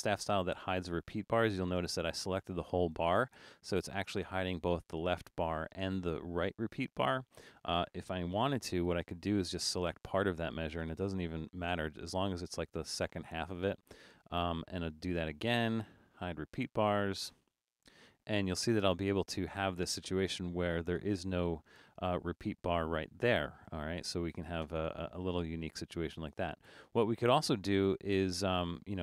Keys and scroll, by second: 8.5 BackSpace.